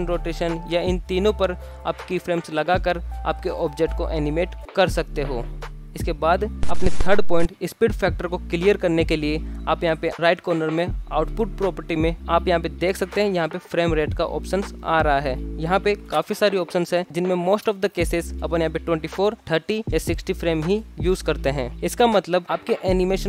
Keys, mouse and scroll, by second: 0.0-2.5 typing, 0.7 shift+Left, 0.8 alt+g, 1.4 click, 2.1 shift+Left, 4.1 space, 5.2 shift+Left, 5.7 space, 11.9-15.0 drag, 15.7-23.2 drag.